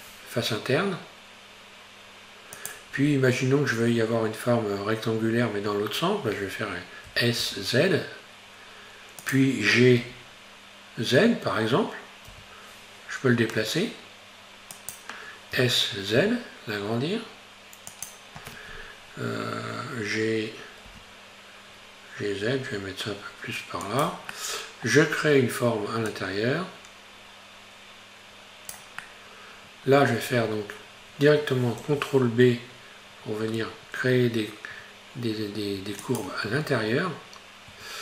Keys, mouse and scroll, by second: 3.0-3.6 scroll up 2, 7.1 s, 10.0 g, 15.6 s, 20.9 g, 24.4 middle click, 25.2-26.1 scroll up 1, 26.1 click, 29.1-30.4 middle drag, 30.4-31.8 scroll up 1, 31.8 ctrl+b, 36.6 Tab, 37.8 Tab.